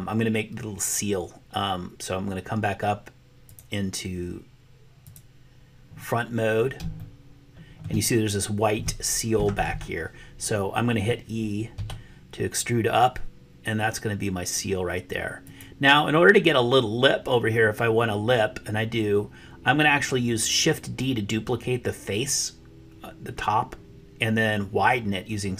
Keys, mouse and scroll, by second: 5.0 click, 7.1 shift+middle click, 7.4 shift+click, 7.5 shift+middle click, 11.8 e.